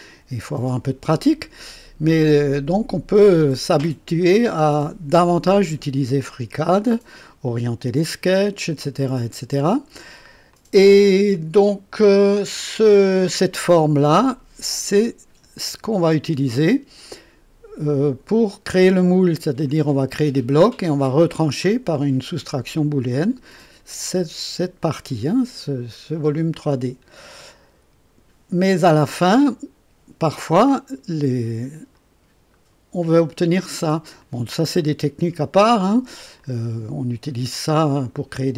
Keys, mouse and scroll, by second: 3.2-4.0 drag, 4.2-6.1 drag, 6.2 click, 9.0-10.3 drag, 10.5-12.2 drag, 12.5-14.6 drag, 14.8-15.7 drag, 26.2-27.5 drag, 31.9 click, 33.0 click, 34.2-36.2 drag, 36.4-38.5 drag.